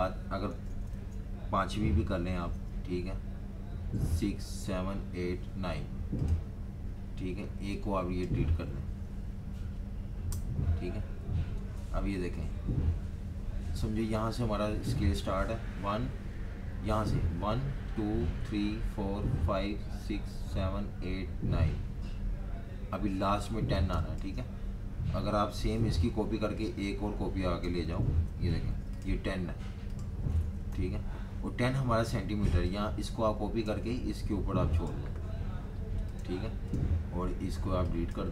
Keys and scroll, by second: 0.5 super+z, 2.3 super+d, 4.1 super+d, 4.6 super+d, 5.0 super+d, 5.5 super+d, 10.1 Delete, 11.7 super+y, 23.9 space, 25.7 super+y, 28.0 super+d, 28.7 super+y, 30.7 Delete.